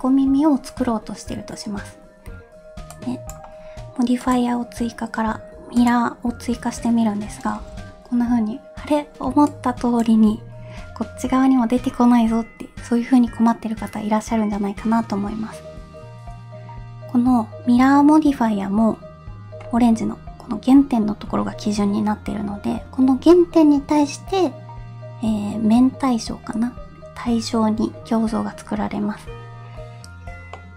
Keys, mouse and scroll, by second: 4.3-6.0 drag, 7.7 n, 30.6 middle click.